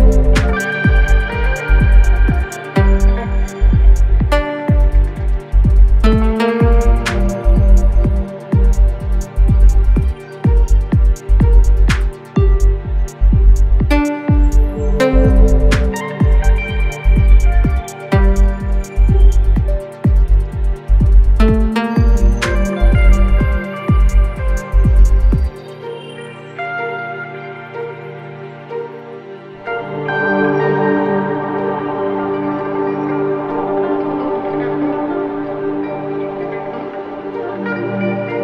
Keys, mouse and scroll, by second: 1.4 1, 1.9 Return, 2.7 click, 3.9 2, 4.3 Return, 5.1 click, 7.0 3, 7.4 Return, 8.4 click, 10.2 4, 10.6 Return, 11.6 click, 14.6 ctrl+space, 14.7 ctrl+click, 15.0 ctrl+space, 16.2-17.7 scroll up 1, 21.0 click, 29.5 ctrl+space, 29.7 ctrl+click, 30.4 ctrl+space, 30.7 click, 31.1 space, 34.4 click, 34.8-35.9 scroll up 1, 35.9-38.4 drag.